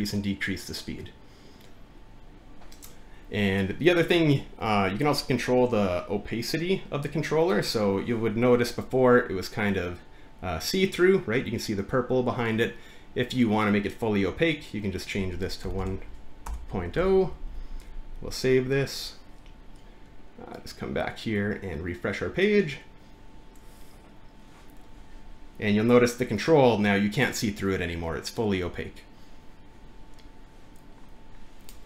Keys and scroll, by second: 15.4-18.5 typing.